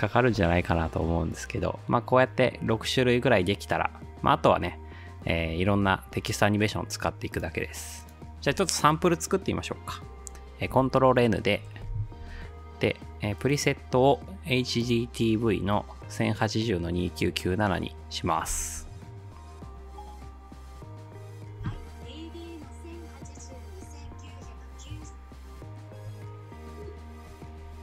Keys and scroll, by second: 10.7 ctrl+n.